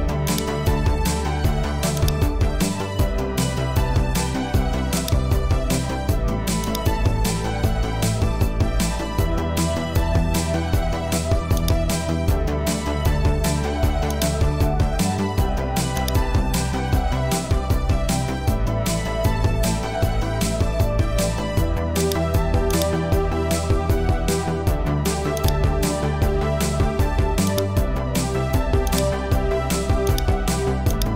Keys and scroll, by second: 13.1 super+t, 18.2 Return.